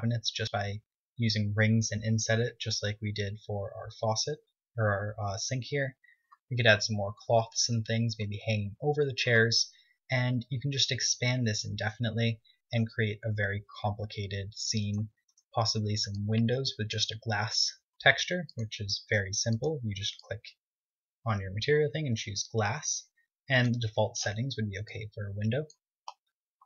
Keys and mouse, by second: 15.1 z, 15.4-18.6 right drag, 16.9 click, 18.2 KP_1.